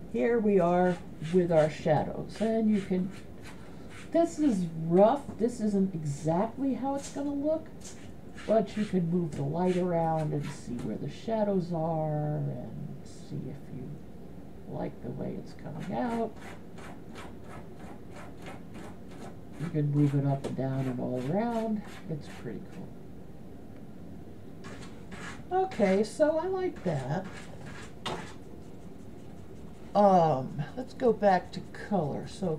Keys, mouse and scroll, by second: 7.7-11.5 drag, 12.5-16.3 drag, 17.7-19.2 drag, 20.1-23.3 right drag.